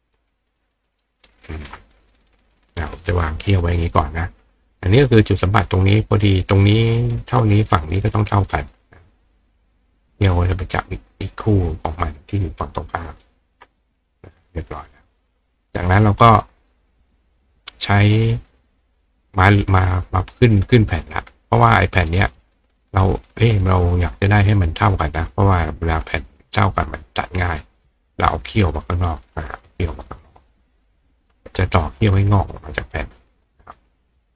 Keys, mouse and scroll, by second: 0.2-1.2 ctrl+drag, 1.8 click, 5.8-7.1 drag, 11.1-13.2 ctrl+drag, 14.4 click, 18.6-27.0 right drag, 23.2-24.8 drag, 26.3-27.6 ctrl+drag, 30.0 click, 30.0 right click, 30.2 click, 31.3-32.4 drag, 32.5-34.3 drag.